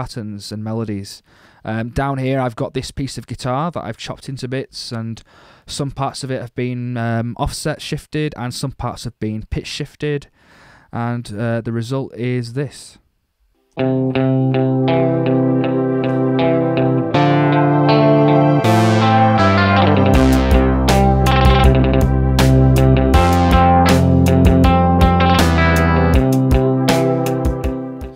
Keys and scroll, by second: 13.6 space.